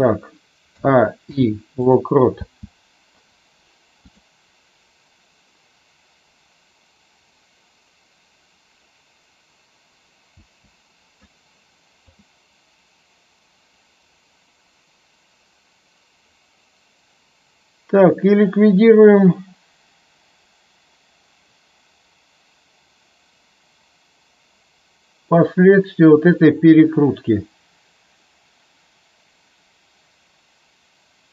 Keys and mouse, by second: 0.7 a, 1.2 i, 2.3 space, 10.3 space, 12.1-31.3 drag.